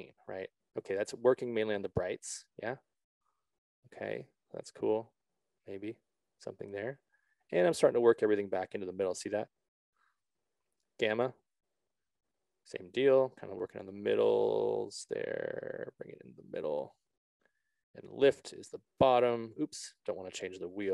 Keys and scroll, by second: 20.6 ctrl+z.